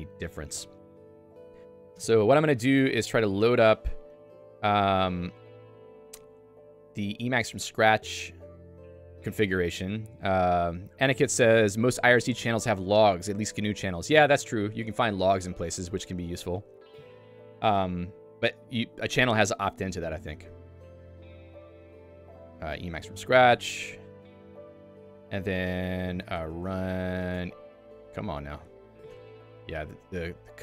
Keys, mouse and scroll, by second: 0.6 Escape, 3.3 a, 4.4 Up, 4.9 Up, 6.7 Down, 8.0 Down, 8.3-9.8 BackSpace, 10.1 BackSpace, 21.0-23.7 typing, 24.2 Return, 24.8 Return, 26.1 /, 27.9 Tab, 29.2 ctrl+g, 29.9 a, 30.3 =.